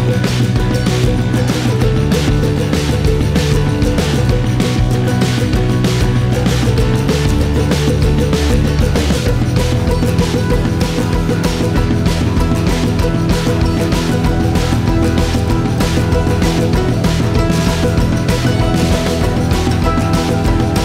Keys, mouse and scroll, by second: 0.0-1.0 shift+middle drag, 1.0 click, 2.5 scroll up 4, 6.5 scroll down 2, 7.7-8.0 scroll down 2, 10.1-11.9 shift+middle drag, 14.3 shift+click, 14.9 shift+click, 15.9 shift+click, 16.9-17.4 scroll down 14, 17.5-18.0 scroll up 7, 18.0-19.1 shift+middle drag, 19.1 r.